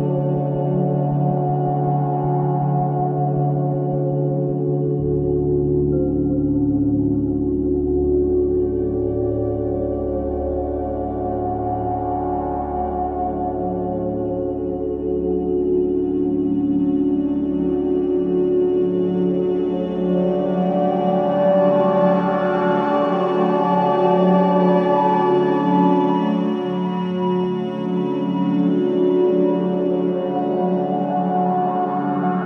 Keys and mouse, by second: 1.5-3.5 typing, 2.6-4.1 drag, 5.2 typing, 7.1-7.5 typing, 8.3-9.9 drag, 9.3 typing, 11.0-11.8 typing, 11.4 click, 13.3-13.9 typing, 13.7 click, 15.3-15.7 typing, 15.4 click, 17.5 typing, 18.8-19.7 drag, 19.1 typing, 21.0 typing, 22.1-22.5 typing, 23.0-24.3 drag, 23.9-25.3 typing, 26.4 click, 27.3-29.0 drag, 27.3-29.2 typing, 30.0 click, 30.5-31.9 typing, 30.7 click.